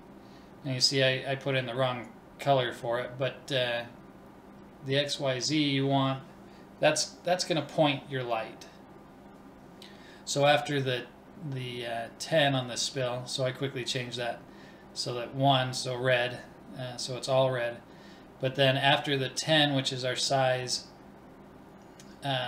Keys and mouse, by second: 0.0-2.5 drag, 7.5-9.0 drag, 9.9-11.8 drag.